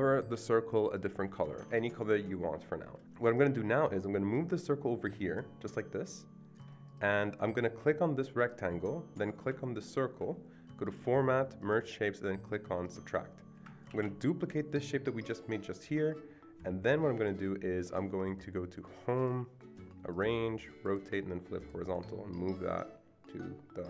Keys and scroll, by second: 1.5 Escape, 1.7 Escape, 13.9 ctrl+d, 19.7 ctrl+d.